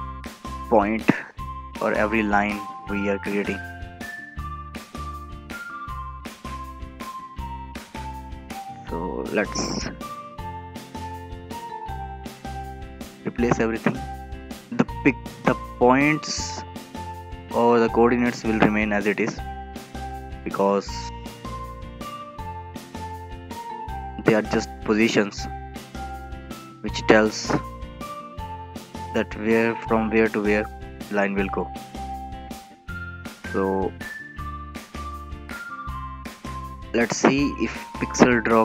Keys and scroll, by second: 2.2 ctrl+v, 7.7 ctrl+v, 12.7 ctrl+v, 16.9 ctrl+v, 23.4 ctrl+v, 27.5 ctrl+v, 33.4 ctrl+shift+Left, 33.7 ctrl+v.